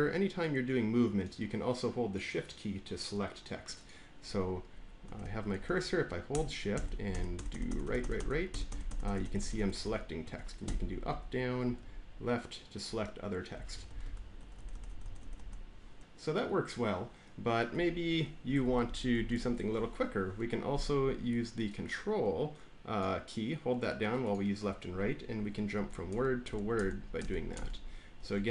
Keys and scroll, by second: 4.9 Right, 5.1 Right, 5.4 Left, 6.6 Right, 7.0 Right, 7.2 Right, 7.5 Right, 7.6 Right, 7.7 Right, 8.0 Right, 8.1 Right, 8.4 Right, 8.6 Right, 8.8 Right, 8.9 Right, 9.1 Right, 9.3 Right, 9.4 Right, 9.9 Right, 10.1 Right, 10.6 Up, 11.0 Up, 11.6 Left, 11.7-12.7 Left, 13.4 Down, 13.6 Down, 13.9 Down, 14.3 Right, 14.3 Down, 14.5 Right, 14.7 Right, 14.9 Right, 15.1 Right, 15.3 Right, 17.6 Right, 18.3 Left, 18.5 Left, 18.8-19.5 typing, 25.6 ctrl+Left, 28.4 ctrl+Right.